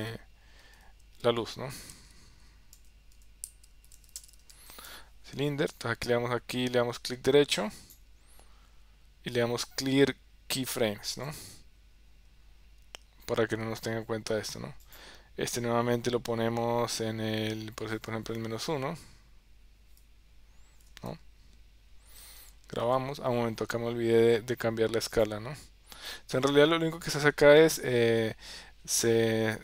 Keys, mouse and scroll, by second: 26.0 ctrl+s.